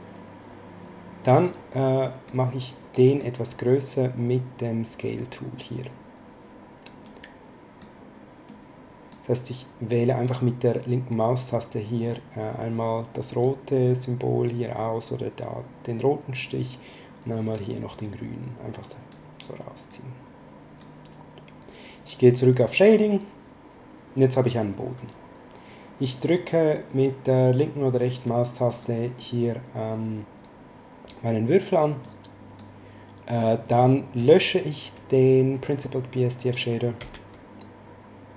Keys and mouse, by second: 1.7 click, 3.0 click, 7.0 click, 8.4 click, 12.1 click, 18.0 click, 19.9 click, 22.7 click, 28.6 right click, 32.0 click, 33.3 click, 37.0 x.